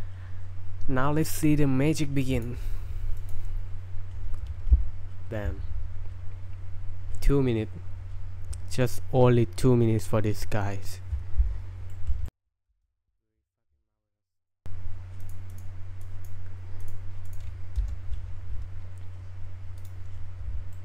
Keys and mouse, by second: 3.3 click, 11.9 shift+middle click, 12.3 shift+middle click, 13.1 right click, 13.1 space, 14.3 click, 15.2 click, 15.5 click, 16.0 click, 16.8 click, 17.2 click, 17.8 space, 19.8 click, 20.7 shift+middle drag.